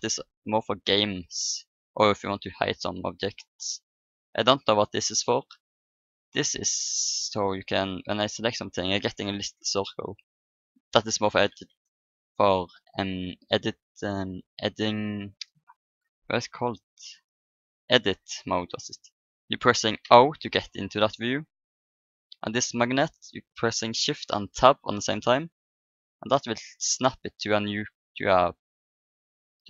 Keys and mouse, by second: 0.6-3.4 drag, 3.9-8.2 drag, 8.1-9.9 right drag, 9.8 click, 18.5 click, 20.0 o, 24.7 shift+Tab, 26.8-28.4 drag, 29.3-29.6 drag.